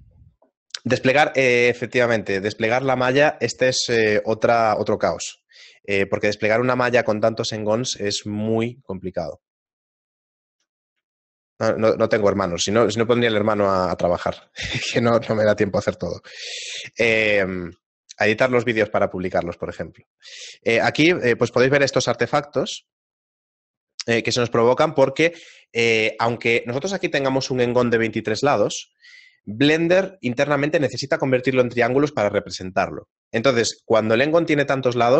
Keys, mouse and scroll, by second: 4.9 middle click, 5.9 shift+middle click, 6.7 middle click, 7.2 shift+middle click, 8.3 middle click, 8.6 shift+middle click, 11.5 shift+middle click, 13.8 middle click, 14.7 middle click, 15.5 shift+middle click, 18.0 middle click, 18.8 middle click, 19.9 middle click.